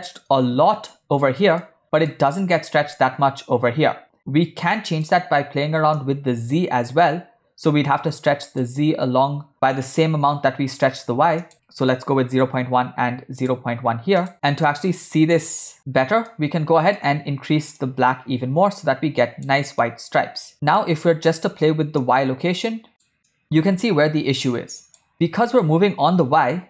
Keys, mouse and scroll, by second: 1.7-2.1 middle drag, 2.3-2.7 shift+middle drag, 4.8 middle click, 6.1-8.6 shift+drag, 11.5 shift+click, 13.5 click, 14.5 shift+scroll up 1, 14.7-15.0 shift+middle drag, 16.3 middle click, 17.9-19.5 drag, 19.9-20.8 middle drag, 22.0-23.1 shift+drag, 23.4-25.0 shift+drag, 25.3-25.6 middle drag.